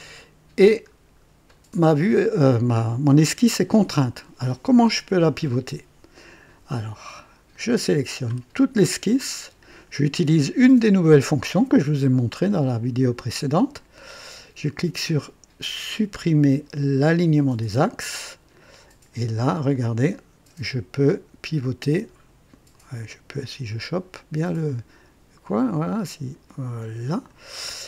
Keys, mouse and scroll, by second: 0.2 right click, 0.9-1.3 scroll up 2, 1.5 right click, 7.5 click, 17.1 click, 19.7 click, 23.4 click.